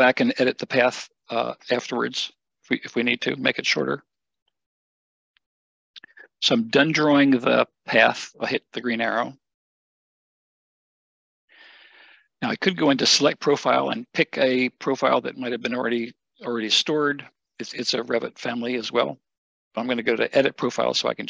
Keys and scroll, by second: 4.5 Escape.